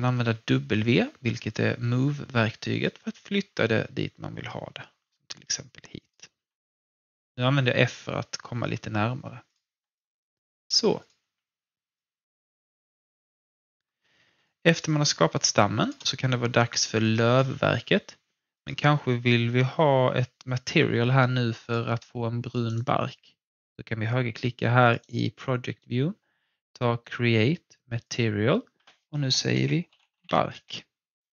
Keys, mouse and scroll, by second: 2.8-6.4 drag, 6.4-7.3 typing, 7.9-8.5 scroll down 1, 8.5 f, 9.4 click, 9.9 alt+click, 11.2 r, 11.9-13.8 drag, 13.8-14.3 scroll down 1, 14.5 alt+click, 15.2-15.7 typing, 15.3 alt+click, 16.1-16.5 scroll up 1, 16.7 alt+middle click, 17.0-18.5 alt+drag, 21.6 click, 22.6 right click, 25.0 right click, 28.0 click, 28.1 click, 29.6-30.8 typing.